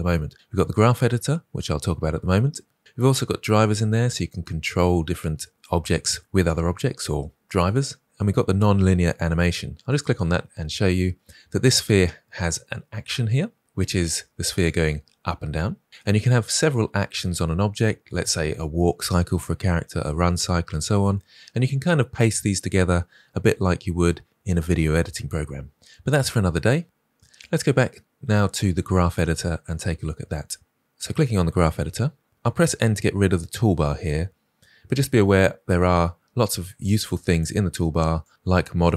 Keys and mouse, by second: 14.6-15.9 drag, 27.5-30.8 drag, 38.2 click.